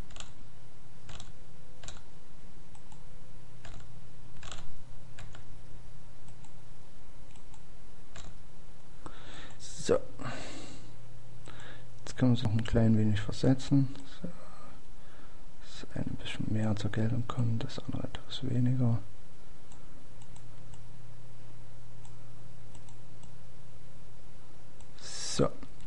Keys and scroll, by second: 2.6 Page_Down, 5.8 Page_Down, 9.0 Page_Down, 12.2 Page_Down, 15.4 Page_Down, 18.6 Page_Down.